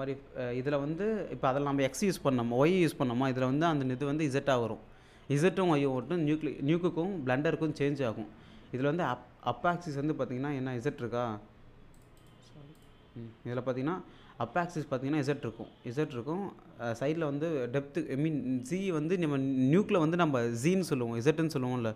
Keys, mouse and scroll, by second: 7.7 alt+Tab, 12.0 click, 20.6 click, 20.7 alt+Tab.